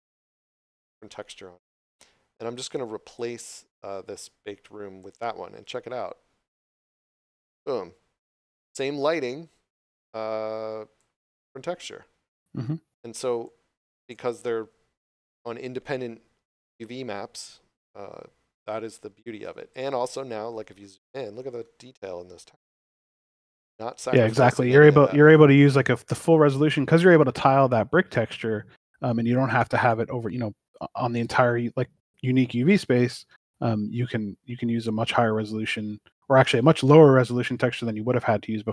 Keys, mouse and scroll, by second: 3.1 click, 9.9 click, 19.4 click, 20.0 shift+middle click, 20.8 scroll up 1, 22.6 click, 28.1 scroll down 1, 29.8 click, 34.7 scroll down 1, 36.8 click.